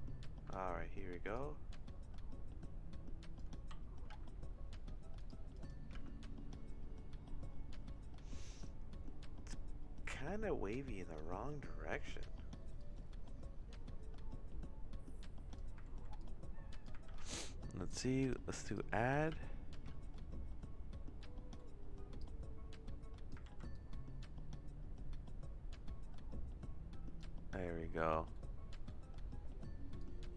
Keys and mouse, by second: 1.3-3.4 drag, 3.5 c, 5.9 space, 12.8-15.6 drag, 15.9 ctrl+z, 16.2 click, 17.1 ctrl+z, 17.9 click, 19.4 space, 19.9 space, 21.2 middle click, 22.2-23.3 drag, 23.5 ctrl+z, 23.7-27.2 drag, 28.3 click, 30.0-30.3 drag.